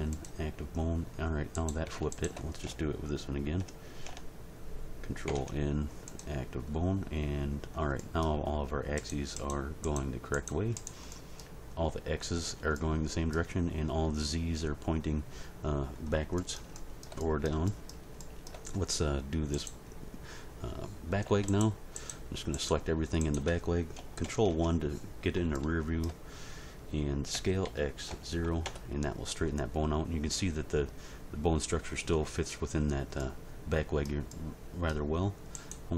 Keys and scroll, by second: 5.3 ctrl+n, 24.4 ctrl+End, 27.3 s, 27.6 x, 28.1 0, 28.6 Return.